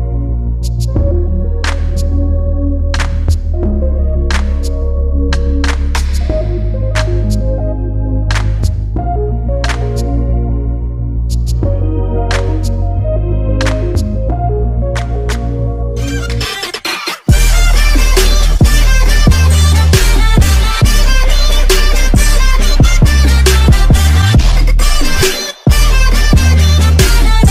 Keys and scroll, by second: 10.8 ctrl+s.